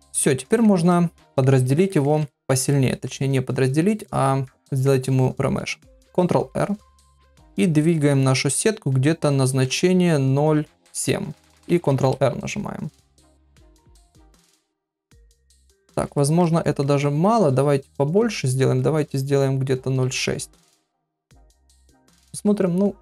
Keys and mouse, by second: 0.5 ctrl+middle click, 0.9 middle click, 1.9 ctrl+middle click, 2.2 shift+middle click, 2.7 ctrl+middle click, 4.0 middle click, 4.6 shift+middle click, 6.3 shift+r, 9.7 shift+r, 12.4 ctrl+r, 14.7 middle click, 15.5 ctrl+middle click, 15.8 middle click, 16.2 shift+middle click, 16.6 ctrl+middle click, 17.8 shift+r, 21.8 ctrl+r.